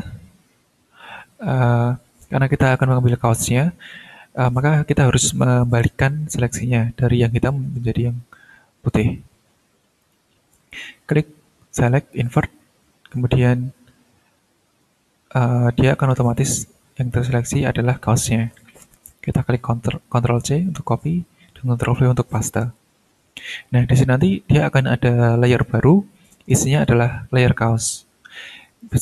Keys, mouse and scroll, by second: 1.1-1.9 ctrl+scroll down 2, 10.0 click, 12.1 click, 21.0 ctrl+c, 22.3 ctrl+v, 28.8 right click.